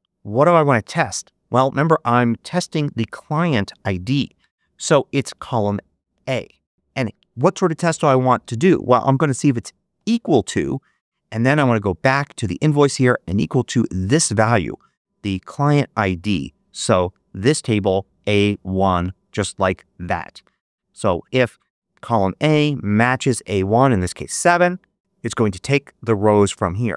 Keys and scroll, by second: 9.9 =.